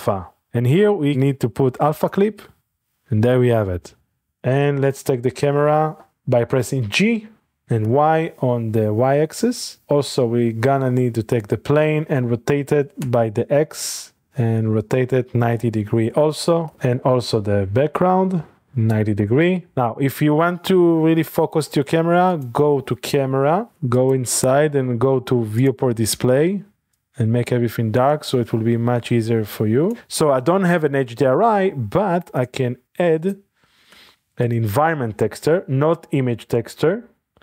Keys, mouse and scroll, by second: 4.9-5.9 shift+scroll down 1, 5.3 shift+middle click, 6.5 middle click, 6.8 g, 7.8 y, 9.8 click, 10.5 middle click, 13.0 r, 14.3 x, 16.0-16.9 typing, 16.7 click, 18.8-19.4 typing, 19.2 Return, 19.7 click, 19.8-20.8 middle drag, 22.3 click, 23.9-25.3 drag, 25.7-26.9 drag, 26.1-26.9 scroll down 1, 32.6 space, 33.2 click, 33.9 a, 34.1 click, 35.0 click, 35.5 typing.